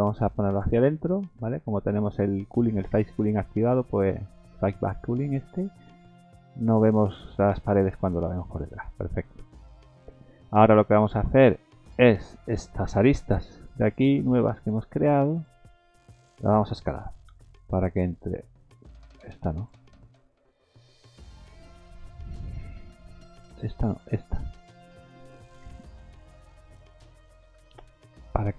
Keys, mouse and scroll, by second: 0.4 click, 1.0 Tab, 1.3 middle click, 1.8 scroll up 1, 2.3 middle click, 2.8 shift+middle click, 3.1 middle click, 3.8 middle click, 4.3 shift+middle click, 4.9 middle click, 5.5 scroll up 2, 5.9 middle click, 6.2-6.9 scroll down 4, 6.9 middle click, 7.5 middle click, 8.7 scroll up 3, 9.1 middle click, 9.5 scroll up 2, 9.8 shift+middle click, 10.0-11.2 scroll down 7, 10.5 middle click, 11.2 middle click, 11.6 Tab, 11.9 middle click, 13.2 2, 13.7 click, 14.6 shift+click, 17.3 s, 19.6 shift+click, 21.4 shift+click, 22.0 middle click, 23.3 shift+click, 25.6 d, 26.6 right click, 27.6 s.